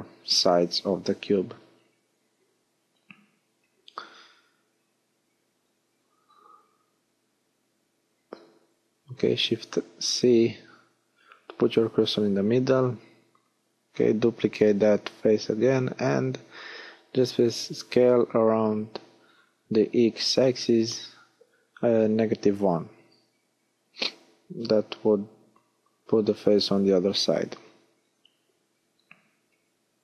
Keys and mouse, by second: 5.3 shift+c, 6.1-7.1 middle drag, 11.3 shift+d, 14.7 s, 19.4 middle click, 20.8 KP_1.